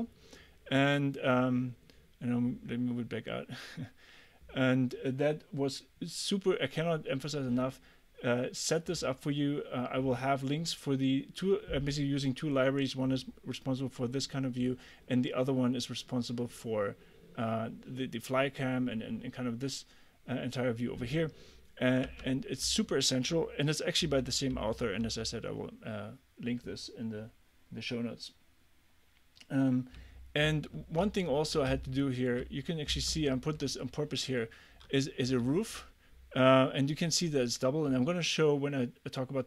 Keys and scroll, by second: 22.1 Escape, 24.1 d, 25.1 w, 30.0 a, 31.7 s, 33.3 a, 34.9 w.